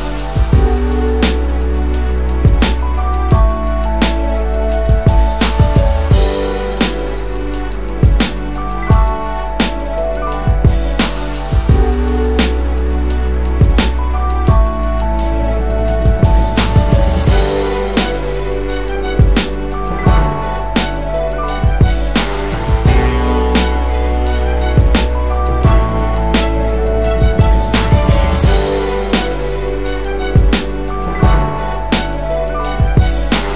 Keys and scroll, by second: 7.6 ctrl+space, 8.2-9.9 ctrl+space, 9.9-11.0 space.